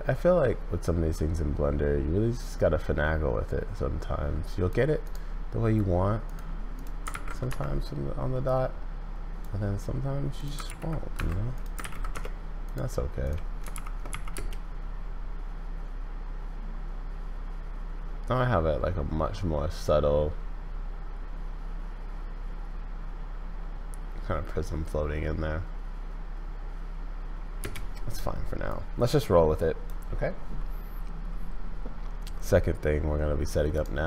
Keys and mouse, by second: 5.1-6.3 drag, 6.7 click, 8.4 click, 10.4-12.6 ctrl+drag, 12.6 middle click, 13.7 shift+Left, 14.3 space, 27.6 space, 28.7-29.9 drag, 33.7 right click.